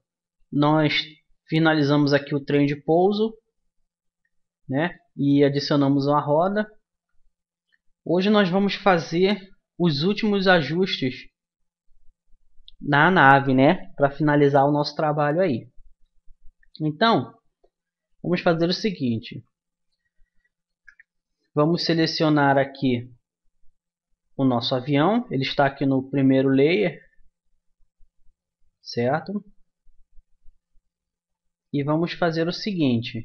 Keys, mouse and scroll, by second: 1.5-3.6 middle drag, 4.4 middle click, 8.8 middle click, 20.7 KP_1, 26.8-28.5 drag, 32.1 typing.